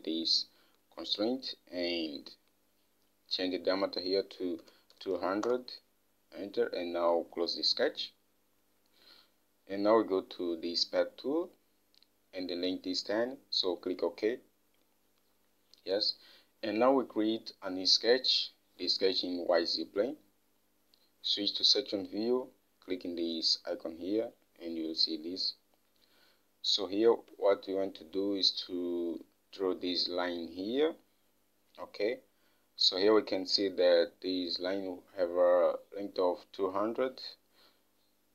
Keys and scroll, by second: 4.8-6.0 typing, 27.5 alt+Tab.